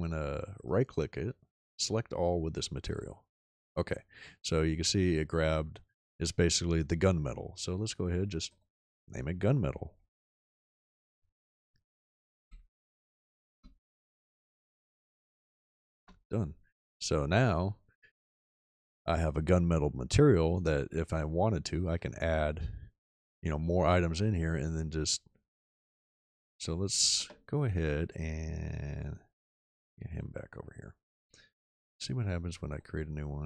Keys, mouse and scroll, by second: 11.8 Caps_Lock, 12.1-16.0 typing.